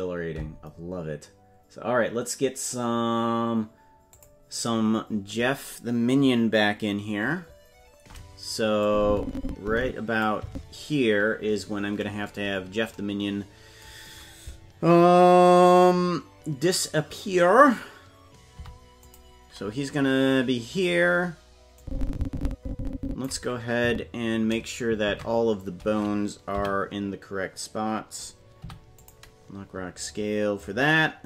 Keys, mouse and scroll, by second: 4.1 click, 8.8-10.2 drag, 10.4 Left, 12.4-12.9 scroll down 6, 21.7-23.2 drag, 23.8 Right, 25.0 ctrl+Tab, 26.5 a, 28.6 i.